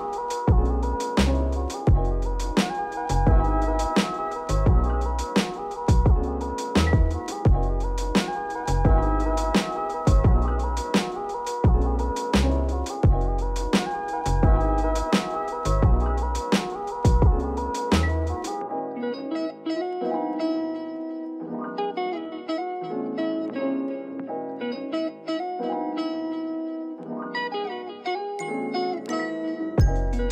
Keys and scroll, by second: 4.3 Delete, 16.9 m, 19.6 ctrl+alt+shift+b, 22.4 m, 24.6 Return, 27.5 m, 28.8 ctrl+alt+shift+b.